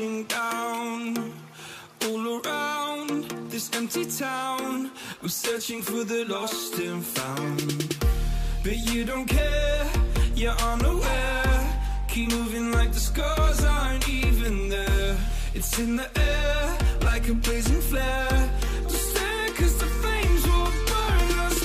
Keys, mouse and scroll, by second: 0.4 Return, 6.2 Right, 6.4 Right, 6.8 Up, 6.9 Up, 7.2 Right, 7.3 Right, 7.7 Up, 7.8 Up, 10.5 ctrl+j, 11.3 alt+click, 19.0 double click.